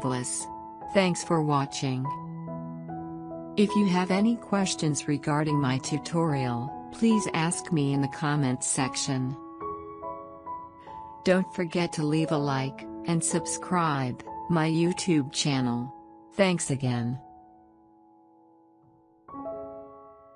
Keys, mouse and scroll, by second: 3.0 click.